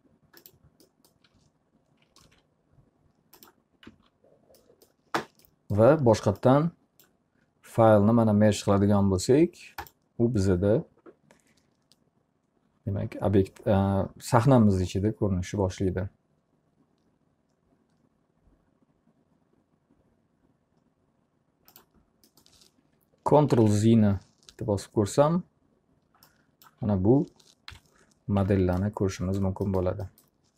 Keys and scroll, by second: 1.8 ctrl+a, 3.8 z, 23.1 ctrl+z, 27.2 p, 28.4 z.